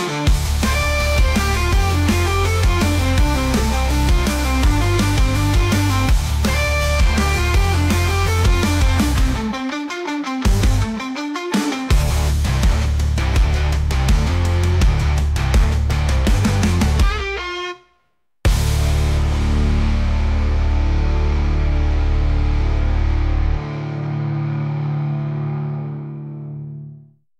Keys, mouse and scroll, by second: 3.4-5.0 drag, 6.2-7.7 drag, 8.3-8.9 scroll up 3, 8.9-9.7 shift+middle drag, 9.7 scroll down 2, 9.9-11.4 middle drag, 11.5 s, 15.7 `, 16.5 g, 19.5 s, 21.1-22.2 middle drag, 22.2 s, 23.9 scroll up 1, 24.0-24.6 middle drag, 24.6 click, 25.9 shift+d.